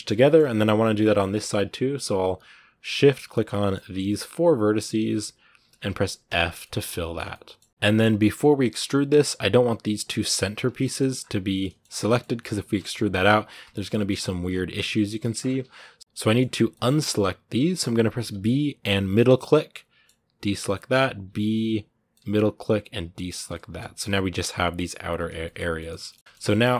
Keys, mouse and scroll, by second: 2.5 right click, 3.2 scroll up 1, 3.3-4.7 middle drag, 4.7-6.1 shift+right drag, 6.1 f, 6.4 middle click, 6.9 scroll down 1, 7.1 middle click, 7.5 Tab, 7.7 middle click, 7.8 scroll up 3, 7.8 middle click, 10.6 middle click, 10.9 scroll up 1, 11.4 middle click, 11.6 scroll down 2, 11.8 middle click, 12.6 e, 13.4 scroll down 2, 13.7 middle click, 14.2 scroll up 1, 15.0 ctrl+z, 15.2 scroll up 2, 15.8 middle click, 16.0 b, 16.0 middle click, 17.0 scroll up 1, 19.8 b, 20.5-22.9 middle drag, 22.9 b, 23.2 scroll down 2, 23.3 middle click, 23.9 g, 25.1 scroll down 2, 25.2 middle click, 26.2 shift+middle click, 26.3 scroll down 1, 26.5-26.7 shift+middle drag.